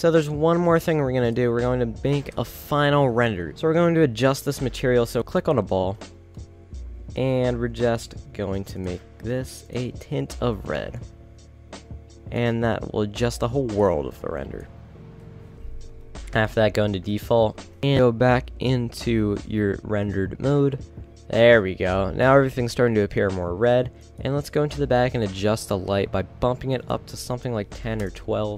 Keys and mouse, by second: 5.3-8.9 right drag, 15.5-16.2 middle drag, 16.2 ctrl+s, 17.9 shift+z.